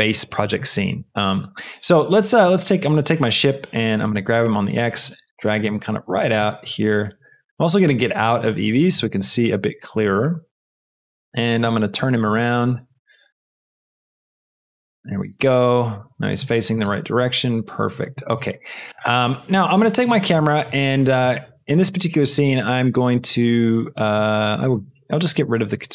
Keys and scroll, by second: 4.1 g, 4.3 x, 6.3 shift+g, 6.5 x, 9.6 shift+g, 9.8 x, 12.9-14.4 typing, 14.6 Return.